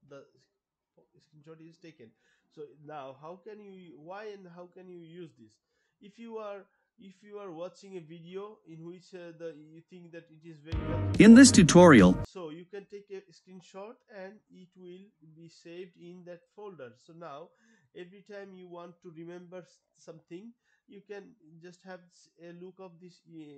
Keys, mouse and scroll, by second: 2.0 Pause, 4.4 click, 5.9-7.7 drag, 10.0 click, 11.6 click, 13.9 Pause, 16.4 click, 17.6 click, 17.8 click.